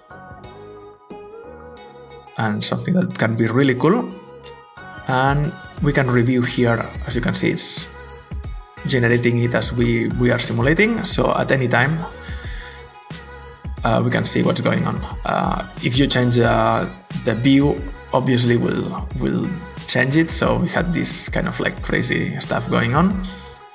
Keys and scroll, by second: 3.9 alt+Tab.